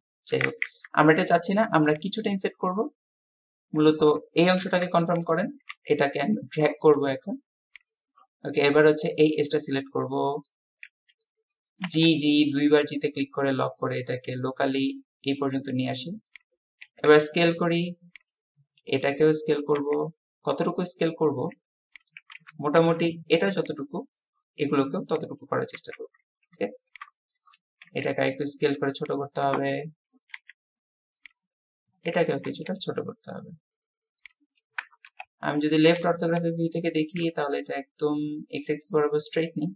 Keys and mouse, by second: 0.5 ctrl+z, 9.6 click, 11.3 click, 11.9-12.2 typing, 16.3-19.0 drag, 16.9 s, 19.8 s, 22.0 click, 27.9 s, 30.4 s, 35.1 KP_3.